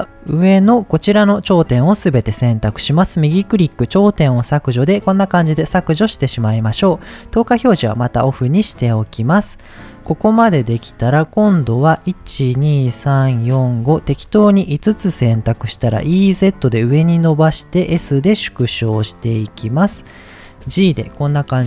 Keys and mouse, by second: 0.1 click, 3.0-4.4 right drag, 4.8 middle click, 7.4 click, 8.7 middle click, 10.6 middle click, 11.9 click, 12.4 shift+click, 12.9 shift+click, 13.3 shift+click, 13.7 shift+click, 14.6 middle click, 15.9 e, 17.3 click, 17.8 s, 19.4 click, 19.8 middle click.